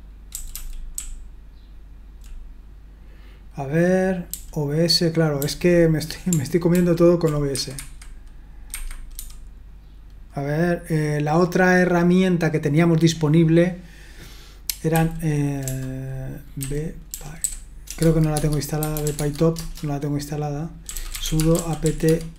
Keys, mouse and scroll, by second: 0.3-2.2 typing, 4.3 typing, 5.4 typing, 6.7 ctrl+d, 7.5 Escape, 7.8 Escape, 8.7 Escape, 9.1 q, 14.9 n, 16.3-22.3 typing, 18.0 Tab, 18.3 Tab.